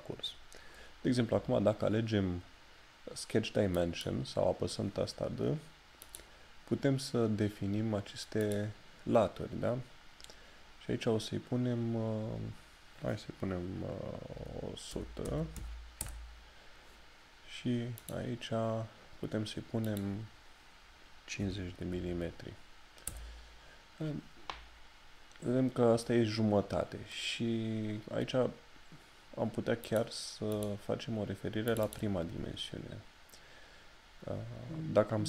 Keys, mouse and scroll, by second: 18.0 click, 29.9 click.